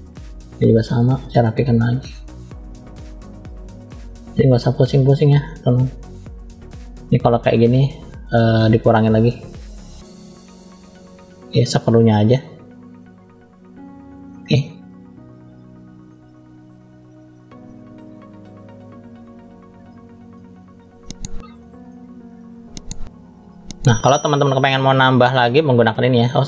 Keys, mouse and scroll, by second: 0.9 middle click, 1.8-2.9 drag, 3.1 click, 4.4 click, 7.8 click, 8.8 click, 9.9 click, 11.6 middle click, 12.2 click, 13.6 click, 13.9 click, 14.3 middle click, 15.1-15.9 scroll down 1, 15.9 middle click, 15.9-16.4 scroll down 1, 16.6 click, 18.8 middle click, 19.5-20.2 scroll up 2, 20.3 shift+middle click, 21.4 middle click, 22.3-22.6 scroll up 1, 22.7 middle click, 24.0 middle click, 25.5 click.